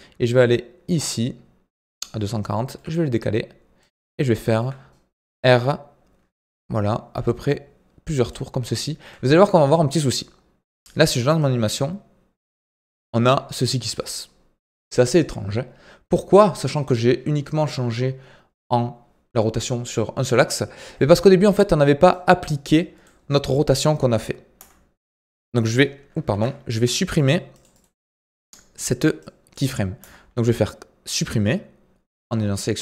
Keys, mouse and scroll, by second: 2.7 g, 4.1 scroll down 2, 4.4-5.1 shift+middle drag, 5.1 r, 10.0-11.3 middle drag, 11.3-21.2 drag, 22.1-24.5 drag, 24.5 Delete, 26.3 ctrl+z, 27.0 click, 27.7-29.2 right drag, 29.2 click, 30.0 Delete.